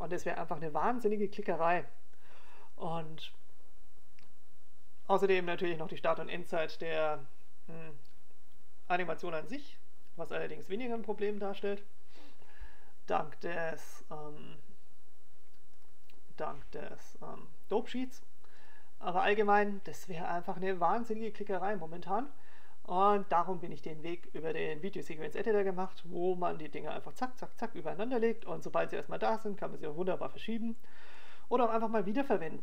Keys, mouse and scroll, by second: 15.0 click, 20.9 click, 24.5 click.